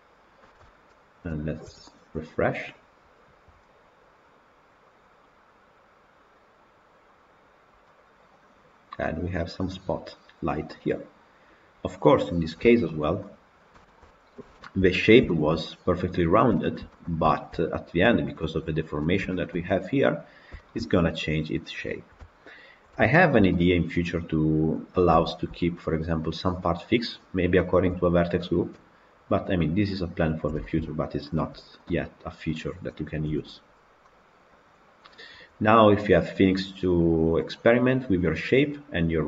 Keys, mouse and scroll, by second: 0.5 Tab, 1.5 KP_Decimal, 7.2 click, 7.7-9.9 middle drag, 9.9 scroll down 1, 10.0-11.2 middle drag, 11.2-11.9 scroll up 4, 11.9-13.0 middle drag, 13.0-13.6 scroll down 7, 13.6-14.1 shift+middle drag, 14.1 scroll down 1, 14.1 scroll up 3, 14.4-14.9 shift+middle drag, 14.9 scroll up 1, 15.1-19.0 shift+middle drag, 19.0 scroll down 3, 19.2-24.8 shift+middle drag, 24.8-25.2 scroll up 1, 25.2-31.8 shift+middle drag, 31.8 click, 32.5 click, 33.2 KP_Decimal, 33.9-36.9 middle drag.